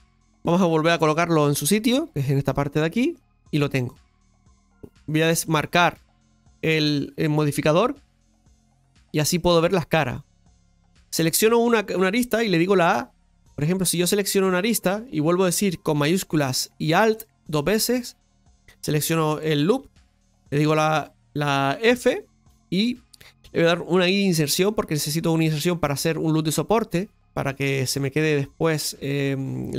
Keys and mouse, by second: 8.1 click, 8.9 shift+middle click, 10.0-12.7 right drag, 12.7 a, 13.5 right click, 14.4-17.0 right drag, 17.1 alt+shift+right click, 21.9 f.